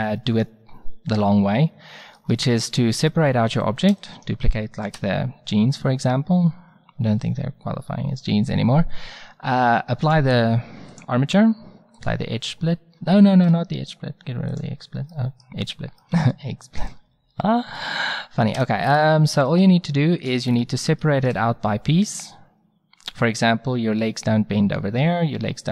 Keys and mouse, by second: 3.9 shift+d, 10.1-12.5 drag, 13.4 ctrl+z, 14.5-16.3 drag, 18.6 Tab.